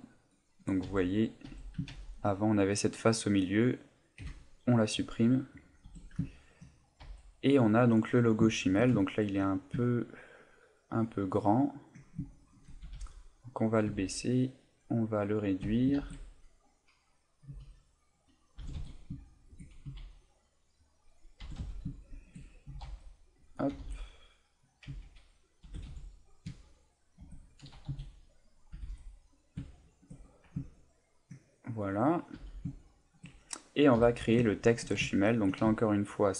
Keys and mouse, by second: 0.8 z, 1.5 z, 2.3 middle click, 3.2 middle click, 4.2 Delete, 5.8 Tab, 6.2 ctrl+middle click, 6.7 middle click, 7.0 z, 7.3 middle click, 8.5 shift+middle click, 9.0 ctrl+middle click, 9.5 middle click, 9.9 ctrl+middle click, 10.6 ctrl+middle click, 11.2 ctrl+middle click, 11.5 ctrl+middle click, 12.4 shift+right click, 12.8 g, 13.5 click, 14.7 right click, 15.0 middle click, 16.7 right click, 17.5 s, 18.4 click, 18.6 g, 19.9 s, 20.9 click, 21.4 g, 22.2 shift+click, 22.7 s, 23.6 click, 23.7 g, 24.7 click, 25.4 click, 25.6 g, 27.2 shift+click, 27.7 s, 28.7 click, 28.7 g, 29.4 click, 29.7 shift+middle click, 30.2 middle click, 30.7 ctrl+middle click, 31.5 middle click, 32.4 a, 32.8 shift+middle click, 34.0 KP_1, 34.6 shift+middle click, 35.1 ctrl+middle click, 35.7 shift+middle click.